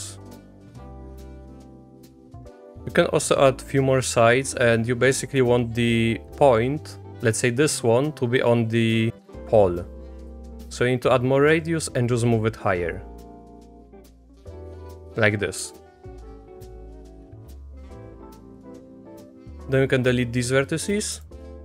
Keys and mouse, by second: 0.6-2.2 drag, 3.0-5.5 drag, 10.2-14.3 drag, 15.8 shift+middle click, 16.8-18.0 drag, 18.0 x, 21.2 shift+click.